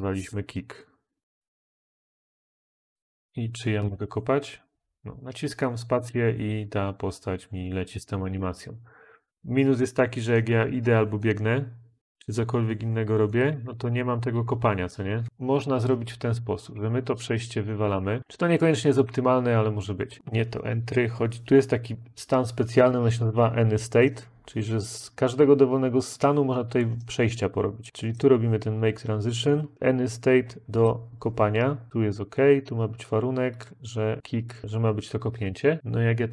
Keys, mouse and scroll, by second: 0.0-0.8 typing, 17.8 Delete.